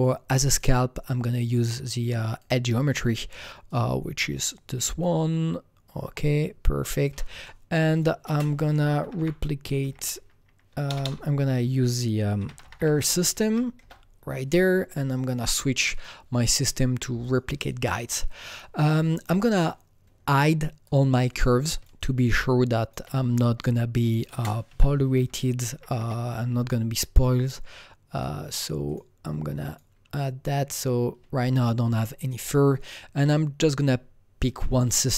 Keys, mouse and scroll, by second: 0.4 click, 2.2 click, 4.4-8.2 drag, 7.4 alt+middle click, 8.2 ctrl+space, 9.0-11.1 typing, 9.1 click, 10.8 click, 12.3-12.7 typing, 13.4 Up, 13.7 Return, 15.2 click, 15.9 Return, 15.9 click, 17.2 click, 19.1-21.2 drag, 21.2 click, 21.9-24.2 shift+drag, 24.2 ctrl+space, 24.7-25.9 typing, 25.7 Up, 25.9 Return, 26.6-28.8 drag, 28.8 click, 29.6 click.